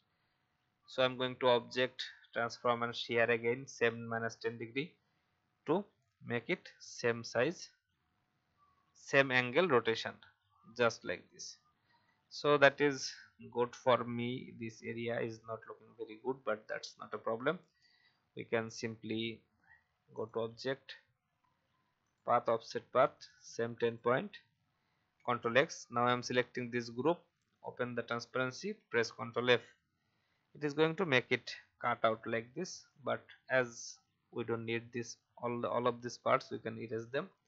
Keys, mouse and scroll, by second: 0.9-1.9 drag, 4.0 click, 5.3 Up, 5.8 Up, 5.8 Up, 5.9 Up, 10.4-10.8 alt+scroll up 2, 11.6 alt+scroll down 1, 12.3 click, 13.7-15.2 alt+scroll up 1, 15.2 Up, 15.7 Up, 15.9 Up, 18.1 Down, 18.3 Down, 18.5 Down, 20.1-23.8 drag, 25.2 ctrl+x, 26.0 click, 28.7 ctrl+f, 31.9 alt+scroll down 1, 32.8 click, 34.6 Delete, 35.0 click, 36.3 Delete.